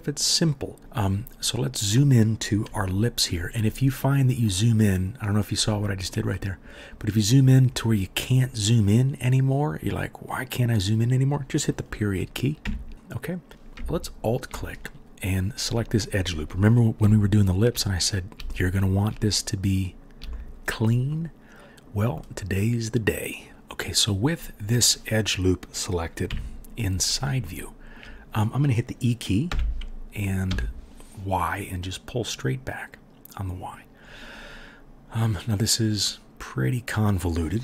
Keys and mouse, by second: 0.8 1, 0.8 KP_Decimal, 12.6 KP_Decimal, 14.0 alt+middle click, 14.0 alt+right click, 26.3 KP_3, 29.5 e.